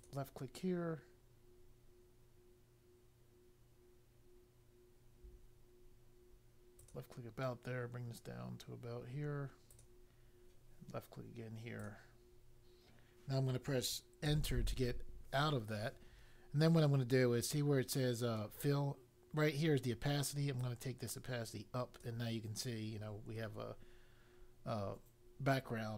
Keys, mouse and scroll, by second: 0.0 click, 6.8 click, 9.6 click, 11.7 click, 14.2 Return, 20.5 click.